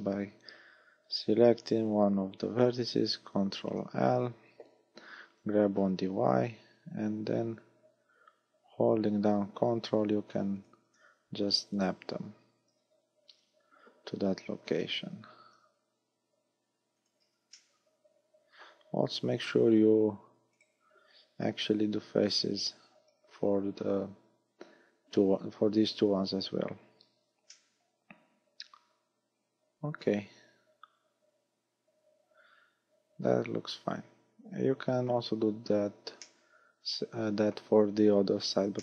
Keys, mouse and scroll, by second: 3.2 ctrl+l, 5.6 g, 10.7 ctrl+click, 11.2-11.8 scroll down 2, 11.8 right click, 13.4 ctrl+l, 14.6 g, 17.1 ctrl+click, 17.6 middle click, 19.7 f, 20.6 right click, 21.7 ctrl+l, 23.1 f, 26.3 z, 27.1 a, 27.6 middle click, 36.3 middle click.